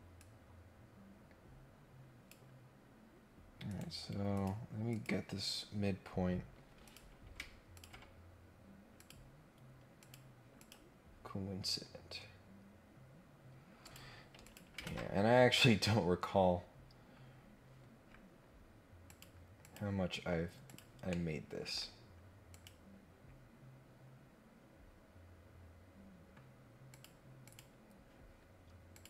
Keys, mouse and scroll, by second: 0.1-2.2 drag, 3.7 right click, 4.3 click, 4.9 click, 6.8 click, 7.7 ctrl+click, 8.9 click, 9.9 click, 10.6 click, 11.2 scroll down 1, 11.5 scroll up 1, 13.8 click, 14.4 click, 14.8 ctrl+Tab, 16.2 scroll down 2, 16.4 scroll up 2, 17.1 scroll down 2, 17.3 scroll up 2, 18.0 scroll down 2, 19.0 click, 19.6 click, 20.6 click, 21.0 middle click, 22.5 click, 26.9 click, 27.4 click, 28.9 click.